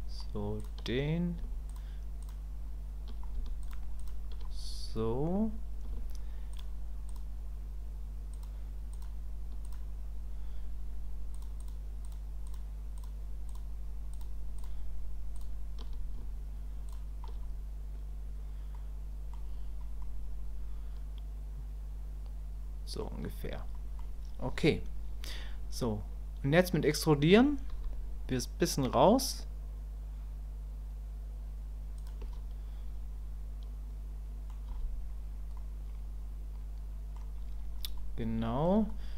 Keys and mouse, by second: 1.7 shift+click, 6.5 shift+click, 7.1 shift+click, 9.6 shift+click, 11.4 shift+click, 12.0 shift+click, 13.5 shift+click, 18.7 click, 20.0-23.0 drag, 23.7 click, 32.3-34.5 middle drag, 35.6-37.2 middle drag, 38.0 middle click.